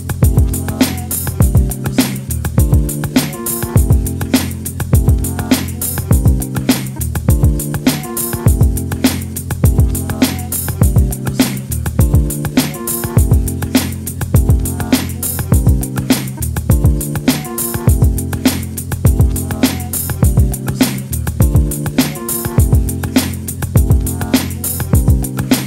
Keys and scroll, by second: 21.4 Down, 21.6 Down, 22.1 Up, 22.3 Up.